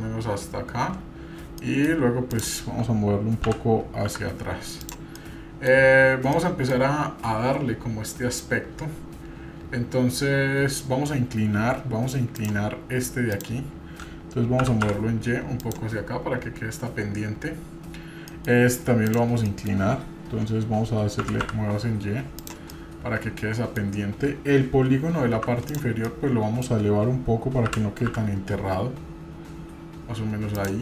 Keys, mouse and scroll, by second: 1.6 middle drag, 2.3 click, 3.5 g, 5.1 middle click, 6.3 middle click, 12.3 click, 13.3 click, 14.6 g, 18.3 middle click, 19.0 click, 19.5 middle click, 21.2 g, 22.7-23.8 middle drag, 25.4 3, 25.7 click, 26.0 middle click, 27.7 g.